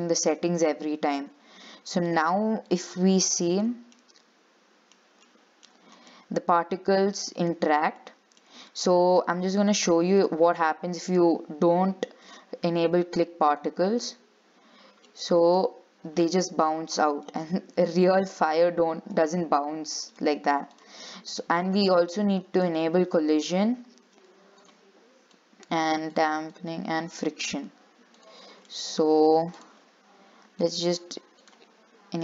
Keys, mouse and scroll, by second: 0.0-1.1 shift+middle drag, 1.1 scroll up 3, 2.2-3.8 drag, 3.8 scroll up 2, 4.2-5.2 middle drag, 5.2 scroll up 1, 5.5 shift+middle click, 6.1 scroll up 3, 6.3-7.7 middle drag, 7.7 scroll up 2, 8.0 scroll down 3, 8.2-9.9 middle drag, 9.9-12.6 drag, 13.7 click, 14.6-14.9 scroll down 3, 14.9-15.2 scroll up 4, 15.2-16.9 middle drag, 16.9-17.4 scroll down 3, 17.4-20.3 shift+middle drag, 20.3 click, 21.4 scroll down 4, 21.6-22.8 shift+middle drag, 22.8-24.9 drag, 25.5-28.8 drag, 28.8 scroll down 3, 28.9 shift+middle click, 29.2 scroll up 3, 29.8 click, 30.8 click.